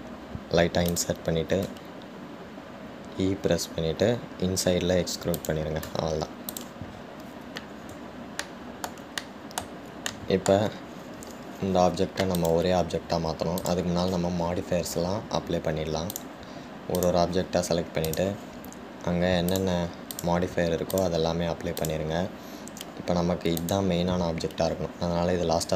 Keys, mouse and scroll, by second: 3.0 e, 7.7 click, 8.1-9.6 scroll down 2, 9.6-13.5 shift+middle drag, 13.5 click, 14.8 click, 17.3-19.4 drag, 20.7-24.9 drag.